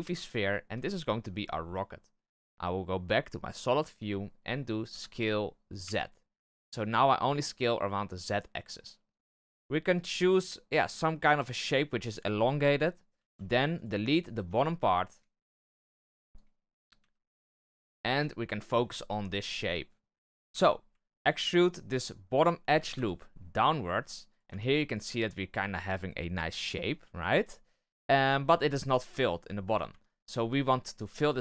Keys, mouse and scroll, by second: 0.3-0.8 shift+middle drag, 0.8-3.5 scroll up 1, 3.5 click, 4.4-4.8 scroll down 1, 4.8 s, 9.7 scroll down 1, 12.3-13.1 scroll up 2, 13.1 z, 13.7 right click, 14.3 Tab, 14.4 right click, 15.0 Tab, 15.5 Tab, 16.0 b, 16.9 x, 17.4 z, 18.1 Tab, 18.6 shift+middle click, 18.9-19.5 scroll up 2, 20.4 Tab, 21.2-22.7 alt+right drag, 22.7 e, 24.4 Tab, 24.7 scroll down 1, 26.7-27.2 scroll up 1, 27.2 w, 28.2-29.5 middle drag, 29.5-29.8 scroll up 1, 29.8 Tab, 30.7 alt+right click, 31.1 shift+middle click.